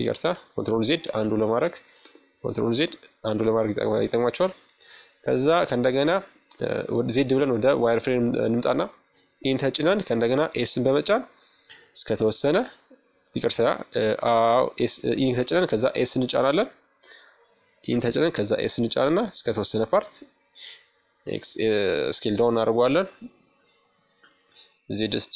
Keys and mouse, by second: 1.1 KP_1, 2.7 middle click, 3.4-5.3 middle drag, 4.3 z, 6.9 e, 12.1 s, 19.6-21.3 middle drag, 20.6 KP_5, 21.5 z, 22.9-24.1 middle drag, 24.4 middle click.